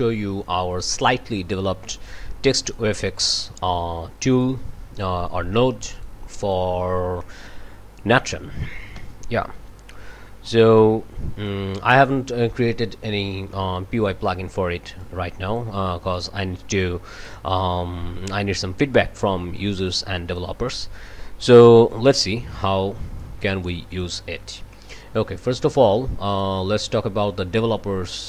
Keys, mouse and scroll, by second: 0.2 o, 0.5 click, 0.7 click, 1.4 click, 1.6 click, 1.9 click, 2.2 click, 2.4 click, 2.7 click, 2.9 click, 3.2 click, 3.6-4.1 drag, 4.2 click, 4.4 click, 4.7 scroll up 2, 4.8 click, 4.9 click, 5.5 click, 5.6 click, 6.3 click, 6.5 click, 6.6 click, 6.8 click, 6.9 click, 7.3 click, 7.5 click, 7.9 click, 8.2 scroll down 2, 8.4 click, 8.5 scroll up 2, 8.9 click, 9.2 click, 9.4 click, 9.5 click, 9.6 click, 9.8 click, 9.9 shift+BackSpace, 10.3 shift+\, 10.4 ctrl+Return, 10.5 click, 10.6 scroll up 4, 10.7 click, 11.6 click, 15.0 click, 15.7 click, 16.5 click, 17.0-18.3 drag, 19.2-23.0 drag, 23.9 scroll down 2, 24.1 click, 26.3 click, 26.8 scroll up 2.